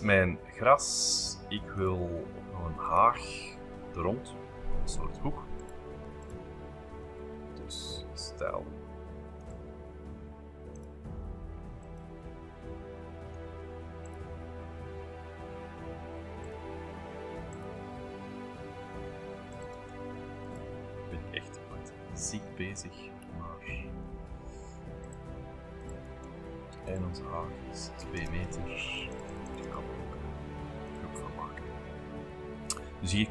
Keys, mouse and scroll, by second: 0.2 scroll, 1.8 click, 2.6-3.6 typing, 5.6-7.0 drag, 7.0-8.4 middle drag, 7.0-7.9 scroll up 1, 9.4 click, 10.7 click, 11.8-13.3 drag, 13.4 ctrl+z, 14.1 click, 16.5 click, 17.6 click, 19.6 click, 19.8 space, 20.5 click, 20.8 Delete, 22.7-23.5 scroll up 2, 23.3 b, 24.1 middle click, 25.0-26.6 drag, 26.8 p, 26.9 click, 28.0 2, 28.2 Return, 28.4 space, 29.0-30.2 drag, 29.8 right click, 30.9 click, 31.4-31.8 scroll down 2, 31.8-33.3 scroll up 3.